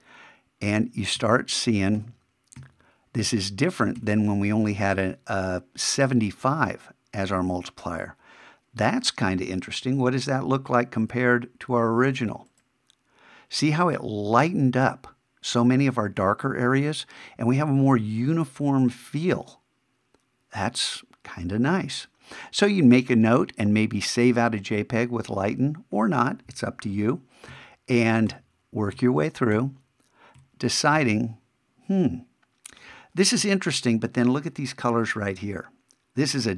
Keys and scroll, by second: 4.9 shift+-, 27.5 shift+=, 30.9 shift+-.